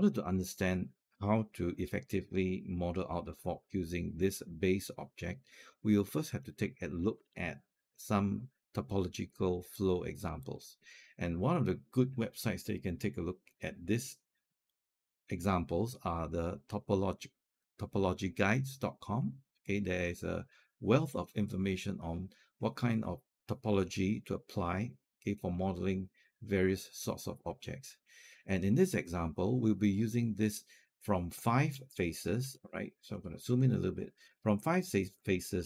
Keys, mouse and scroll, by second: 6.3 alt+middle click, 10.2 click, 14.5 click, 32.6-34.0 ctrl+scroll up 4, 34.0 ctrl+scroll down 1, 34.1-34.5 scroll up 1, 34.5 middle click, 35.0 scroll down 1.